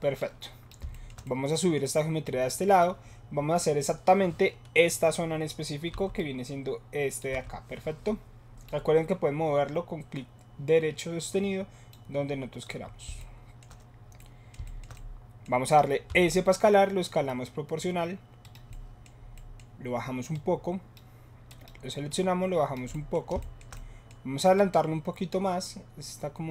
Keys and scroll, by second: 6.0 7, 16.0 s.